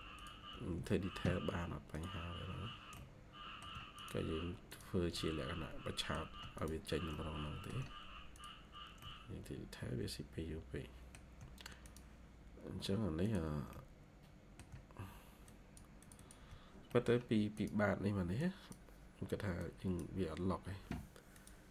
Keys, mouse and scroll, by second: 0.4 Escape, 0.6 Escape, 5.0 middle click, 7.0 middle click, 8.9 middle click, 11.3 shift+scroll down 1, 13.6 middle click, 14.7 scroll down 1, 16.1 double click, 16.8 middle click, 17.8-18.9 scroll up 1.